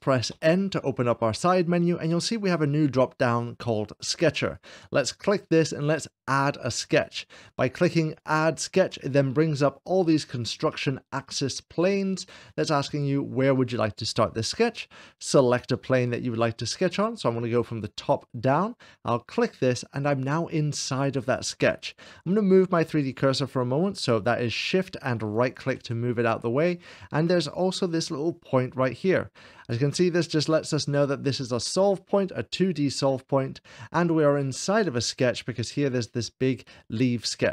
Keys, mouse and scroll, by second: 0.4 n, 4.4-5.4 drag, 4.7 n, 8.0-9.0 drag, 11.0-12.5 middle drag, 19.0-20.2 drag, 25.0-26.1 shift+right drag, 27.5-28.6 drag.